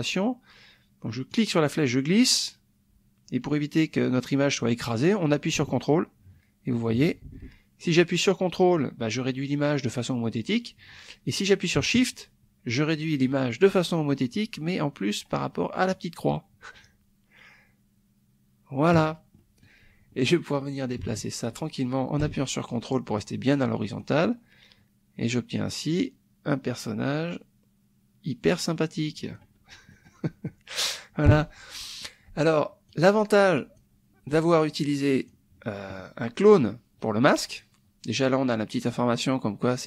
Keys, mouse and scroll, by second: 1.3-19.0 drag, 19.5 click, 20.3-29.5 drag, 29.9 middle click, 30.1 click, 30.4 click, 31.3 click, 32.9 click, 33.4 click, 34.5 click.